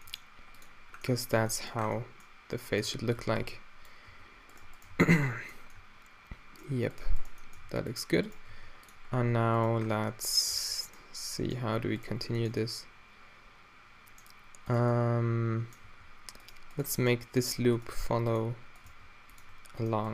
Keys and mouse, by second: 0.1 g, 1.0-1.7 middle drag, 1.4 Tab, 2.9 Tab, 3.2 a, 3.5 b, 4.1 q, 4.5-5.4 drag, 4.9 q, 7.6 click, 7.6 g, 8.5 g, 10.6 a, 10.7-11.4 drag, 11.4-11.7 middle drag, 12.0-13.8 drag, 14.7-15.0 drag, 15.0-16.6 right drag, 15.8 g, 16.7-17.9 right drag, 17.9 g, 18.1-20.1 right drag, 18.4-20.1 drag, 18.9 e.